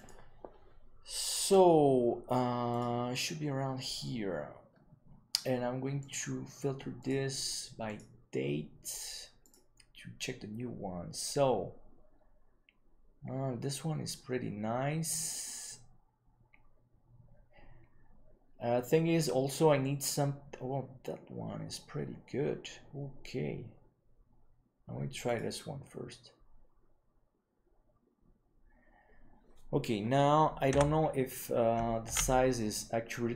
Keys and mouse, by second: 30.7 n, 32.4 ctrl+s.